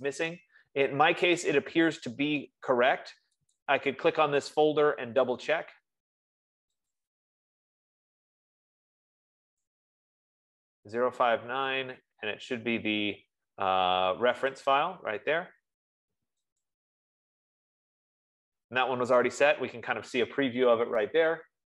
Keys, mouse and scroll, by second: 4.1-6.6 drag, 7.3 click, 15.2 click, 17.0 click.